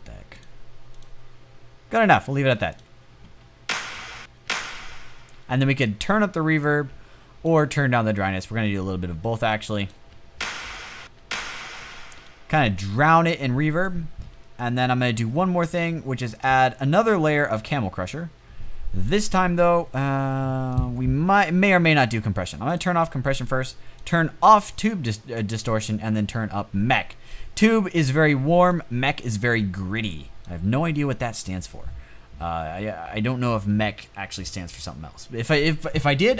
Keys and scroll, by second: 2.9 space, 3.5 space, 3.7 space, 4.0 space, 9.7 space, 10.4 space, 11.3 space.